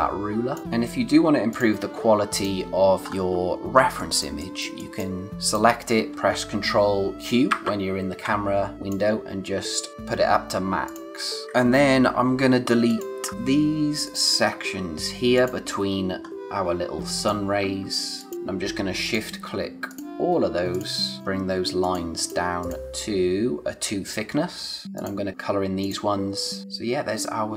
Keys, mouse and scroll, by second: 0.5 scroll down 1, 1.5 click, 1.9-2.3 scroll down 1, 2.3 click, 3.0-3.4 scroll down 1, 3.7 space, 3.9 click, 4.2 space, 4.3 click, 5.3 scroll up 1, 5.4 click, 7.4 ctrl+q, 8.7 click, 10.8 click, 12.8 click, 15.8-16.2 scroll down 1, 16.2 scroll up 1, 17.1 click, 24.8 click, 26.7 scroll down 1.